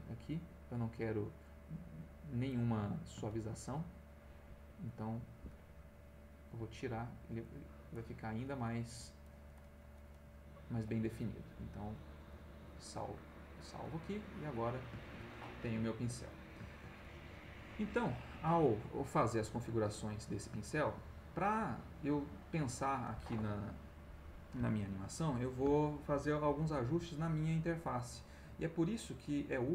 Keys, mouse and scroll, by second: 2.5 click, 3.3 ctrl+z, 3.7 ctrl+click, 4.8 click, 5.4 Escape, 5.7 click, 6.7 click, 8.6-10.4 drag, 10.8 click, 12.3 click, 13.5 click, 14.2 click, 15.0 ctrl+z, 15.3 ctrl+middle click, 16.3 ctrl+middle click, 19.1-20.5 middle drag.